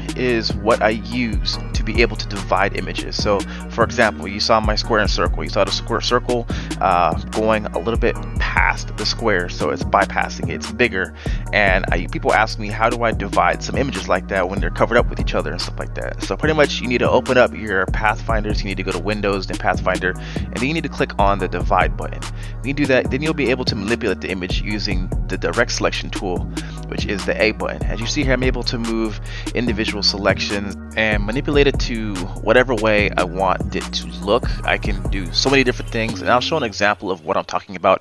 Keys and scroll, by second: 22.5 typing, 24.9 a.